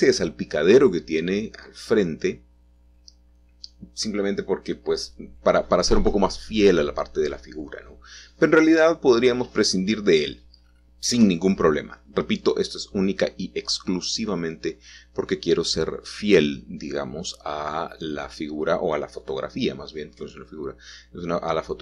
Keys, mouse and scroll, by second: 0.6 g, 0.8 y, 5.2-5.9 scroll up 3, 6.4 shift+middle click, 7.0-10.3 middle drag, 13.0 middle click, 17.3-18.7 shift+middle drag, 18.9 middle click, 19.1 click, 20.7 g.